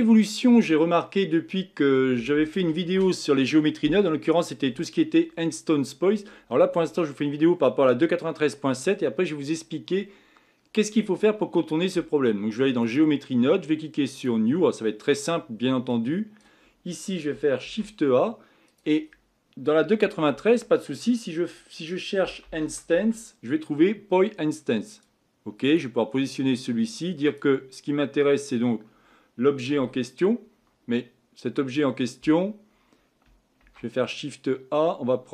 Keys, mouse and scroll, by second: 0.9-1.5 scroll up 4, 1.5-4.5 scroll down 2, 12.8 click, 14.2-25.7 drag, 29.7 click.